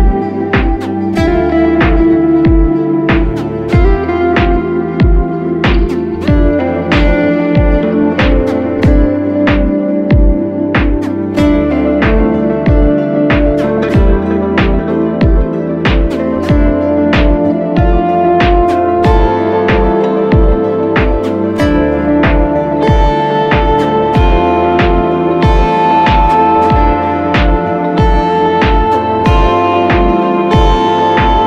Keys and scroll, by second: 3.5-4.7 typing, 5.4 Return, 8.8-9.9 typing, 21.8 super+c.